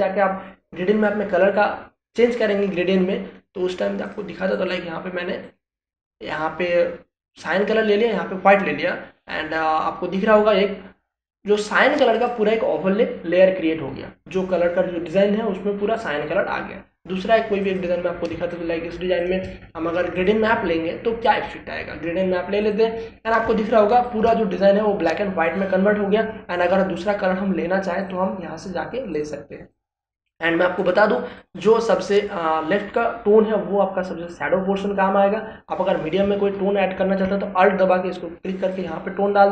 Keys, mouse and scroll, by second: 5.0 click, 11.1 click, 18.6 click, 19.3 ctrl+space, 19.5 ctrl+click, 19.8 ctrl+space, 21.1 click, 24.4 ctrl+space, 24.6 ctrl+click, 24.9 ctrl+space, 27.5 click, 38.9-39.5 alt+drag.